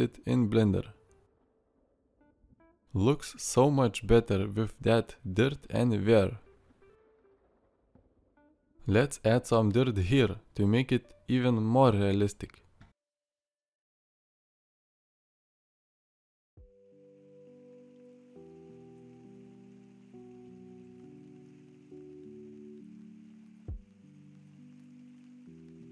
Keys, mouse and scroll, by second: 1.9 alt+r, 6.7 middle click, 8.2 middle click.